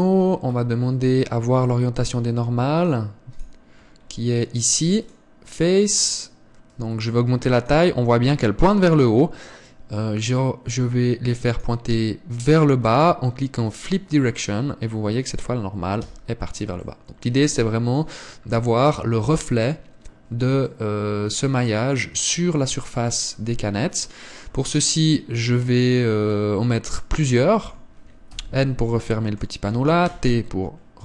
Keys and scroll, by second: 16.8 Tab, 29.1 n, 30.8 t.